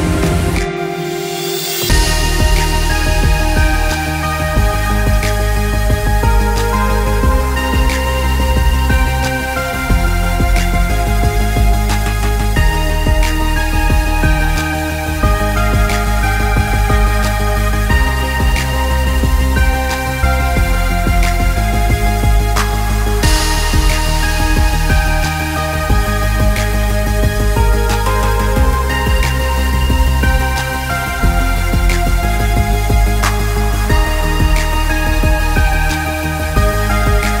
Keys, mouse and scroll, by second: 0.3 middle click, 0.8 middle click, 1.7 g, 4.7-5.3 scroll down 2, 4.9 middle click, 5.3 middle click, 5.7 click, 6.1 g, 8.0 g, 10.5 g, 12.5 click, 13.1 middle click, 13.4 click, 13.7 click, 13.9 click, 14.2 middle click, 14.8 ctrl+z, 15.1 ctrl+z, 15.3 ctrl+z, 16.0 middle click, 17.1 middle click, 17.7 click, 18.3 click, 19.1 g, 22.3 middle click, 23.1 click, 23.5 middle click, 24.2 scroll up 4, 24.5 scroll down 2, 24.7 middle click, 25.1 click, 25.6 click, 26.0 click, 26.3 middle click, 27.4 g, 30.4 middle click, 30.6-31.0 scroll up 1, 31.0-31.5 scroll down 2, 31.5 click, 32.2 g, 34.0 g, 36.3 middle click, 36.8 click, 37.2 middle click.